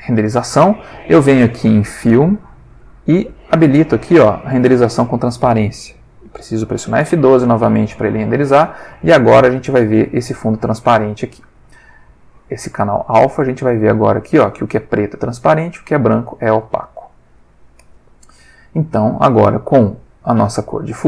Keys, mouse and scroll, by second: 2.8 click, 4.3 click, 6.4 F12, 10.1 click, 12.1-13.6 drag, 16.4-16.9 drag, 16.9 middle click, 17.1 click, 17.5-20.1 middle drag, 20.1-21.0 drag.